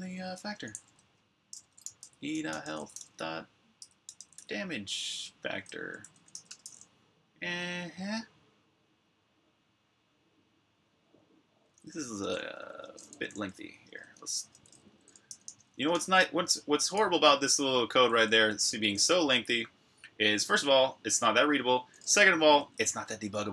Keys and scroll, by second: 0.0-2.6 typing, 3.8-4.1 typing, 5.4 Tab, 5.6 Tab, 5.9-6.7 typing, 11.3-18.9 typing.